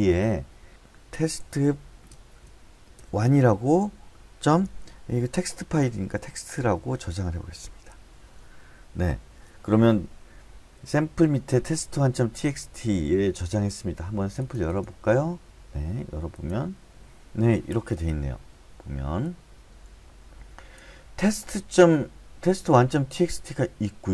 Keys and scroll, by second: 0.5-3.6 typing, 4.6 typing, 5.7-7.1 typing, 7.6 Return.